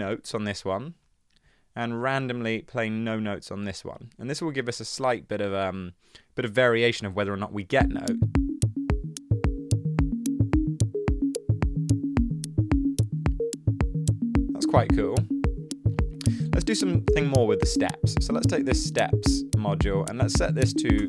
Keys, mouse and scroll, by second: 20.4-21.0 typing.